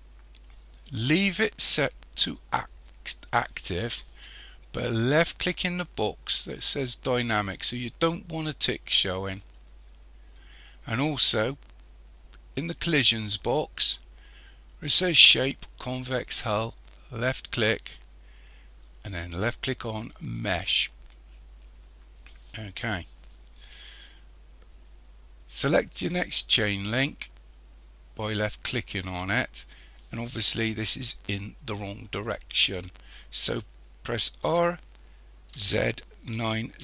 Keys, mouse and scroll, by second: 9.4 click, 12.6 click, 13.2 click, 17.2 click, 22.3-25.6 scroll down 3, 28.3 click, 30.6-31.3 scroll up 1, 31.3-32.4 scroll up 2, 32.4-34.4 scroll up 1, 34.5 r.